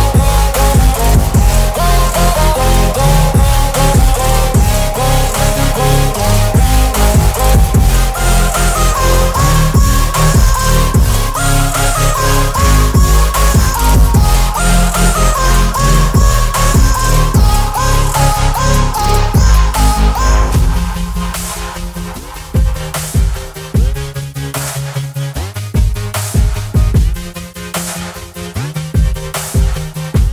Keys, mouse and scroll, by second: 0.9 click, 1.7 shift+click, 3.0 ctrl+g, 4.6 click, 5.9 shift+b, 6.8 shift+7, 7.2 t, 7.7 Return, 11.6 Return, 11.6 click, 12.4 shift+click, 13.1 ctrl+z, 14.5 click, 18.8 click, 23.5 right click, 25.1 click, 28.5 right click, 29.5 click.